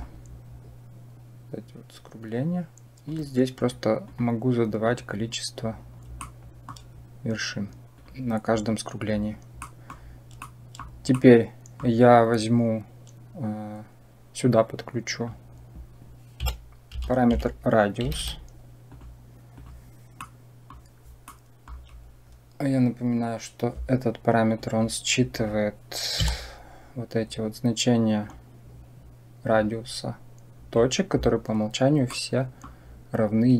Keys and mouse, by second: 2.9 click, 3.4 click, 3.9 click, 4.7 click, 6.1 shift+middle click, 7.8 click, 9.5 middle drag, 10.3 shift+middle click, 11.1 middle click, 14.3-19.5 drag, 20.1-20.7 middle drag, 21.1 middle click, 24.5 click, 25.2 click, 26.1 Tab, 28.1 click, 32.0 middle click.